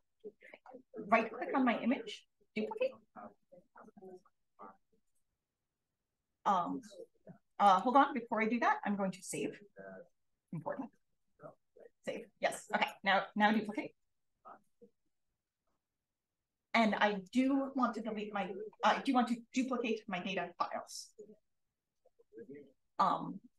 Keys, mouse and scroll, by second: 3.5 click, 7.6 click, 8.0 click, 15.2 click.